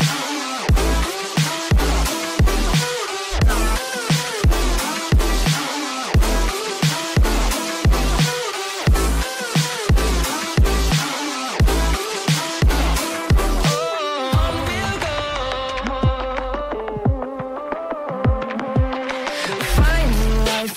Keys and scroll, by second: 6.7 space, 9.4 F2, 13.1 space, 13.4 F4.